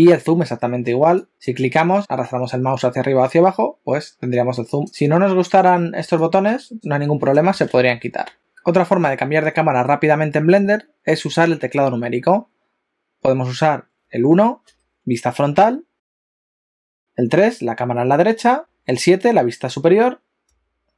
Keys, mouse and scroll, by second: 1.3 click, 2.0 click, 8.4 click, 14.7 KP_1, 16.5 KP_3, 18.6 KP_7, 20.4 KP_9.